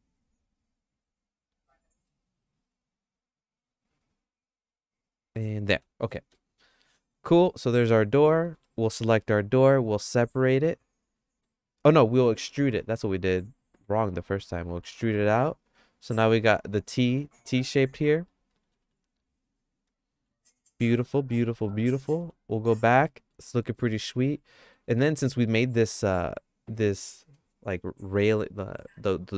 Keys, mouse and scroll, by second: 6.0 middle click, 6.3 shift+middle click, 8.6 3, 8.7 click, 9.2 middle click, 9.7-10.9 shift+middle drag, 10.9 click, 13.0 e, 16.3 middle click, 16.7 shift+middle click, 18.6 g, 21.2 middle click, 21.7 shift+middle click, 22.2 Tab, 22.8 middle click, 23.5 middle click, 23.9 middle click, 25.0 middle click, 25.9 click.